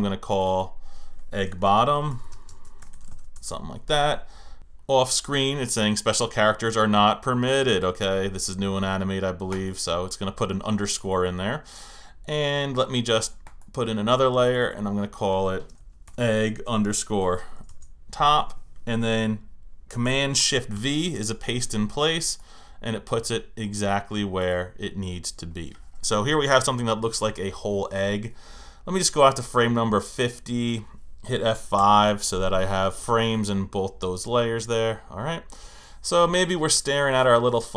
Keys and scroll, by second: 3.3 Return, 17.7 shift+Return, 31.8 F5.